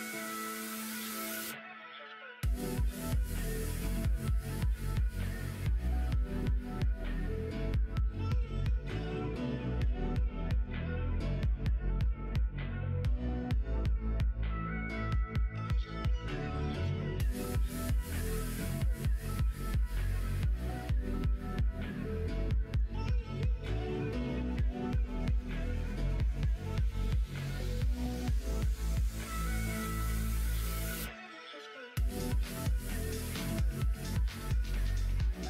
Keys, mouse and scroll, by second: 0.5 click, 0.9 middle click, 1.7 middle click, 3.3 click, 3.8 shift+click, 4.1 shift+click, 7.2 ctrl+r, 15.8 click, 18.5 e, 20.9 ctrl+z, 21.6 click, 22.0 middle click, 22.6 middle click, 23.0 middle click, 24.1 e, 26.6 click, 27.7 e, 30.1 click, 30.5 e, 33.4 click, 33.7 g.